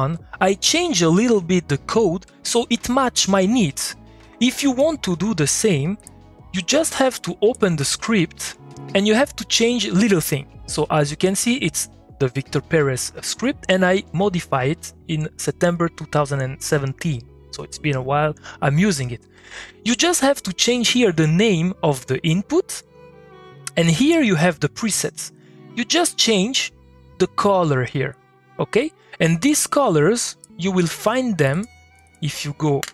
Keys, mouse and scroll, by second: 29.6 click, 31.2-31.5 scroll up 1, 31.5 click.